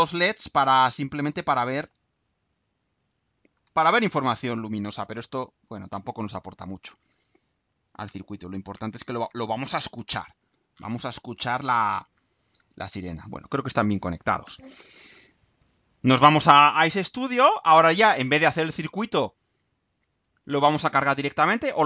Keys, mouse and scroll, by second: 17.2 click, 18.5 scroll down 2, 19.2-20.2 right drag.